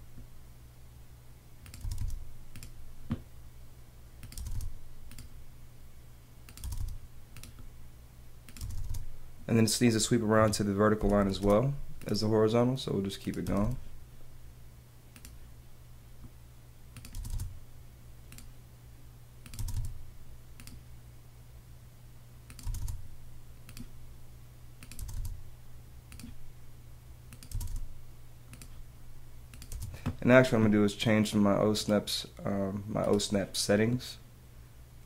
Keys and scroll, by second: 1.8 space, 4.3 space, 5.1 space, 6.6 space, 8.6 space, 9.8 space, 10.3 Escape, 12.1 space, 13.4 space, 17.1 space, 18.2 space, 19.6 space, 20.7 space, 22.6 space, 23.7 space, 25.0 space, 26.1 space, 27.5 space, 28.6 space, 29.7 space.